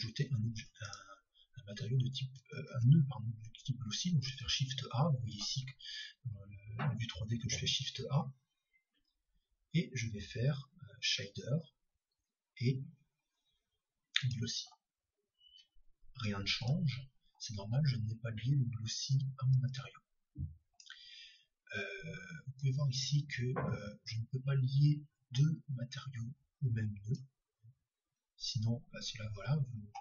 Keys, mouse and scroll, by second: 0.8-3.2 right drag, 3.2 shift+a, 4.4 shift+a, 7.8 shift+a, 16.7-27.2 drag.